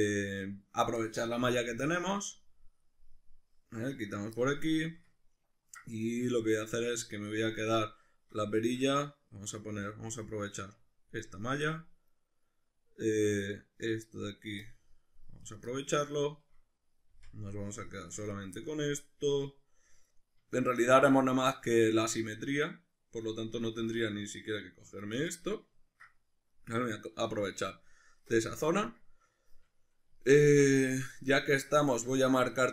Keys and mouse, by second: 0.1 right click, 1.4 c, 4.5 right click, 4.7-9.7 shift+middle drag, 9.7 c, 15.5 right click, 15.7 middle click, 17.1 c, 18.4 right click, 18.5 middle click, 19.4 middle click, 20.7-25.3 middle drag, 23.8 c, 25.3 right click, 25.5-32.5 middle drag, 32.5 shift+right click.